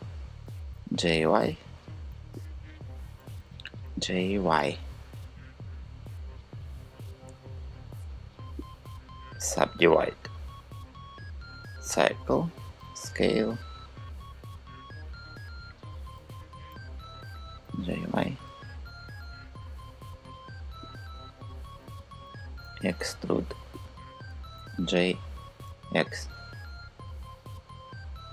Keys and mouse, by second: 3.5 g, 4.2 y, 12.4 s, 14.0 click, 16.0 KP_3, 17.3 g, 17.6 y, 22.3 e, 23.4 click, 24.2 g, 25.3 x, 28.0 click.